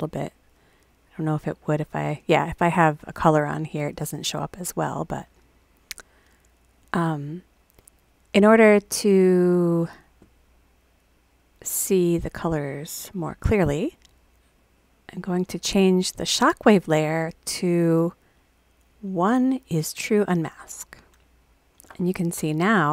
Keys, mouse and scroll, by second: 0.3 click, 1.6 click, 6.7 click, 14.5 click, 14.7 click, 14.9 click, 15.1 click, 15.2 click, 15.4 click, 16.3 click, 17.2 click, 20.0 click.